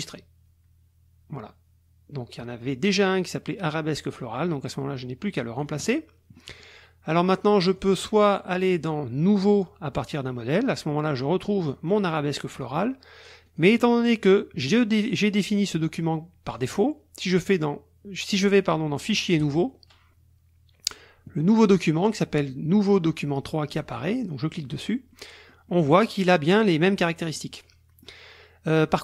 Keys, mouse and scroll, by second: 5.5 click, 7.8 click, 9.5 click, 11.6 click, 13.4 click, 16.6 click, 19.4 click, 23.7 click, 25.1-25.9 drag, 26.1 click, 26.1 right click, 27.3 click.